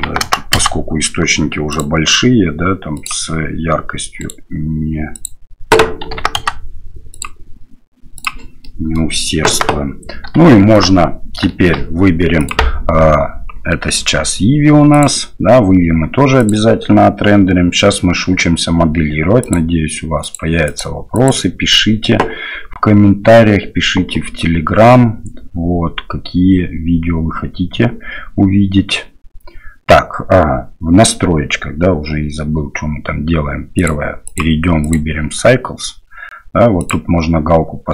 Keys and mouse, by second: 0.2 KP_0, 4.2 right click, 5.1-6.4 drag, 7.1 click, 8.6 middle click, 9.4 KP_0, 10.4 shift+middle click, 11.5 shift+click, 14.9 click, 20.2 click, 20.6 click, 21.1 click, 33.8 click, 34.2 click, 36.7 click.